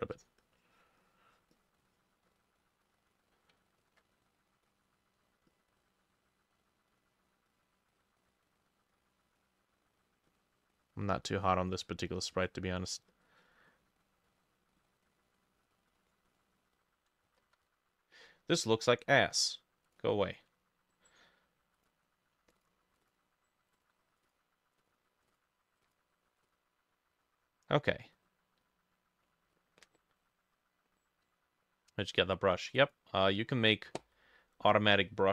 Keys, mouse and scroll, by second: 0.5 double click, 1.8 double click, 2.7-13.3 drag, 3.5 ctrl+middle click, 14.1 double click, 14.4 double click, 14.8 double click, 15.4 double click, 16.0 double click, 16.3 double click, 17.4 ctrl+z, 23.0-25.0 drag, 25.3-27.3 drag.